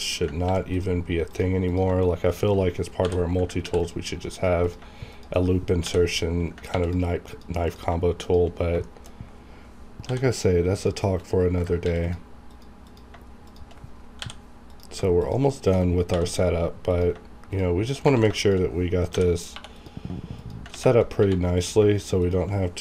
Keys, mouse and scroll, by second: 0.4 ctrl+r, 0.7 click, 2.3 shift+click, 3.0 j, 3.6 ctrl+r, 3.8 ctrl+click, 4.3 click, 4.6 click, 5.1 shift+click, 5.8 j, 6.7 ctrl+r, 6.8 ctrl+click, 7.3 click, 8.2 shift+click, 8.6 scroll down 1, 8.8 shift+middle click, 9.2 scroll up 1, 10.1 j, 10.8 click, 11.8 ctrl+r, 12.0 ctrl+click, 14.2 j, 14.7 click, 15.5 shift+middle click, 16.1 j, 16.9 click, 18.1 ctrl+z, 18.4 ctrl+shift+click, 19.1 ctrl+j, 19.5 ctrl+2, 19.8 ctrl+click, 20.7 ctrl+x, 21.2 1, 21.6 click, 22.2 shift+click.